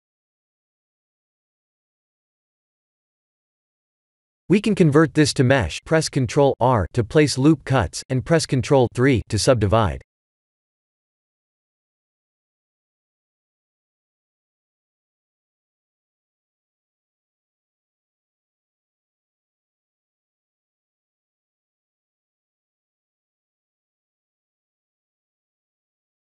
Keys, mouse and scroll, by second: 0.6-1.1 scroll down 3, 1.1 middle click, 1.2 middle click, 2.2 middle click, 2.4 middle click, 4.0 middle click, 4.0 middle click, 5.5 KP_1, 7.3 right click, 10.0 click, 10.4 Tab, 11.4 Tab, 12.0 ctrl+1, 13.0 Tab, 14.1 scroll up 1, 15.1 Tab, 15.1-15.4 scroll up 1, 15.6 ctrl+3, 16.1 Tab, 18.1-18.7 scroll up 2, 18.7 shift+middle click, 19.3-19.7 scroll up 1, 20.3 ctrl+r, 23.1 click, 24.7 click.